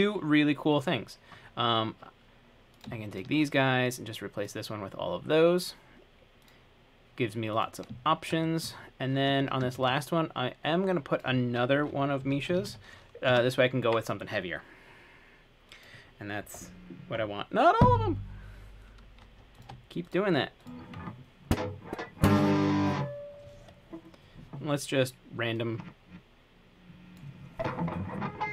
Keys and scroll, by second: 12.2-13.4 typing, 13.5 Return.